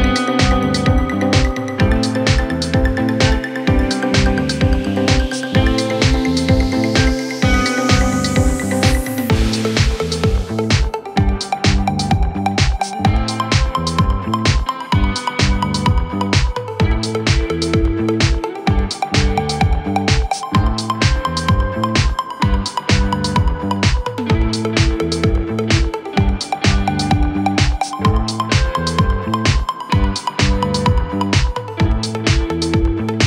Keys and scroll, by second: 0.5 w, 1.5 shift+F2, 2.3 F3, 2.8 Escape.